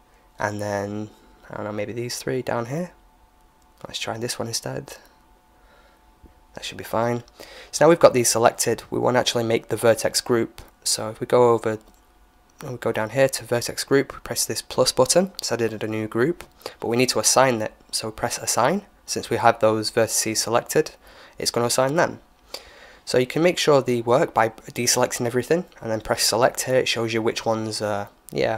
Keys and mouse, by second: 1.2-4.2 right drag, 4.5 right click, 12.2-14.0 middle drag, 14.2-16.1 drag, 17.5-19.4 drag, 20.7 a, 22.1 a, 22.6 a, 25.5-27.5 drag.